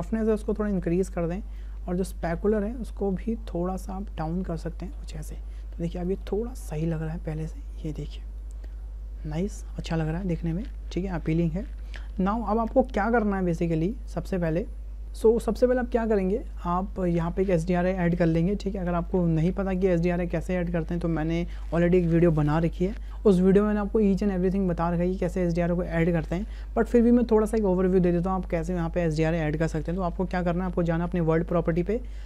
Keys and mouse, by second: 1.6-4.9 drag, 6.1 click, 6.4 space, 12.1 space, 14.0 click, 31.5 click.